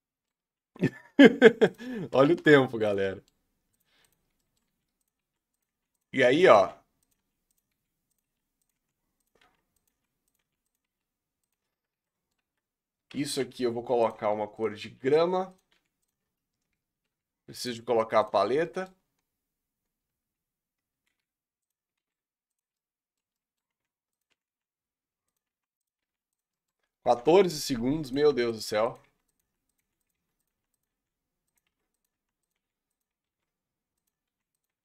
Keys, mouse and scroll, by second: 0.4-1.3 scroll up 3, 1.7 click, 2.9 Delete, 3.0 middle click, 4.0 click, 4.3 scroll down 2, 4.4 middle click, 4.7-15.7 typing, 6.2 scroll down 2, 6.4 middle click, 12.1 middle click, 16.2 Tab, 16.7 Tab, 17.0 Tab, 18.3 click, 18.7 middle click, 18.9-19.7 scroll down 11, 19.7-20.4 scroll up 10, 21.1 g, 21.9 shift+d, 22.8 middle click, 23.1 scroll up 1, 23.3 middle click, 23.7 r, 24.3 r, 25.4 r, 26.0 g, 26.5 middle click, 27.1-34.7 typing.